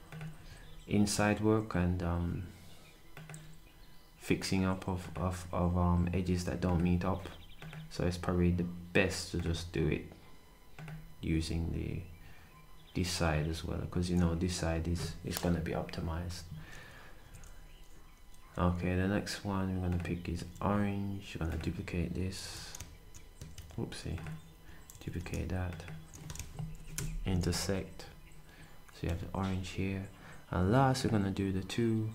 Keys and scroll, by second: 0.3 s, 11.3 s, 17.2 d, 20.3 s, 22.4 d, 24.9 d, 26.9-29.5 typing.